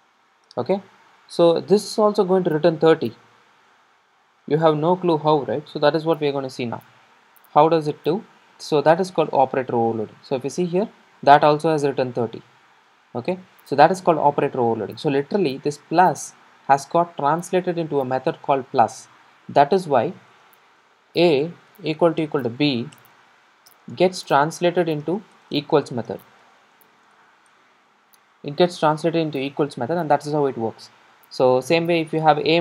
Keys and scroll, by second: 4.4 super+r.